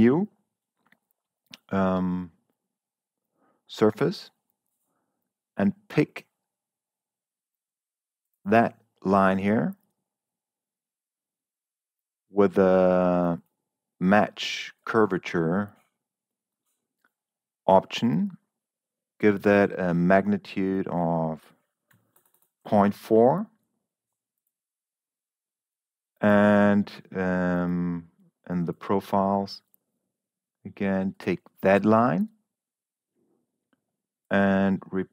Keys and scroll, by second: 22.3 ., 22.6 4.